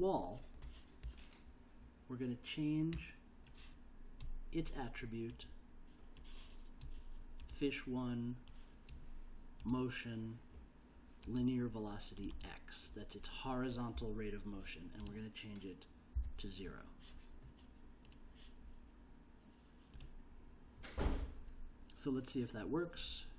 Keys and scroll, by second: 16.2 0.